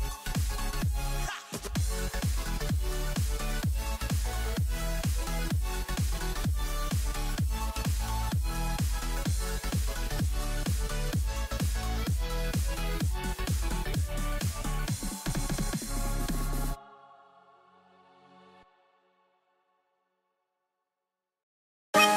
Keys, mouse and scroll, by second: 6.0 typing, 7.3 click, 11.3 BackSpace, 13.1 click, 15.1-15.5 scroll down 1, 16.2 click, 16.5-17.1 scroll down 1, 17.2-18.2 typing, 17.8 scroll down 1, 17.8 click, 18.3 click, 18.9 click.